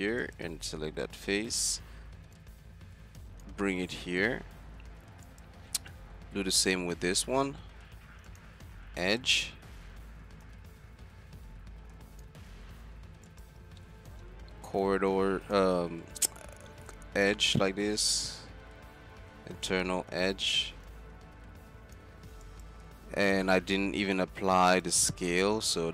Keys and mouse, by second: 4.6 Tab, 5.5-5.8 drag, 5.8 z, 6.3 Tab, 7.7 middle click, 9.3 z, 9.6-12.2 middle drag, 12.5 z, 13.6 z, 13.9-15.5 middle drag, 15.6 z, 18.4 z, 19.2 click, 19.2 z, 20.2 click, 20.3 z, 22.0 click, 22.0 z, 22.5 click, 23.0 z, 23.8 Tab, 25.5 right click.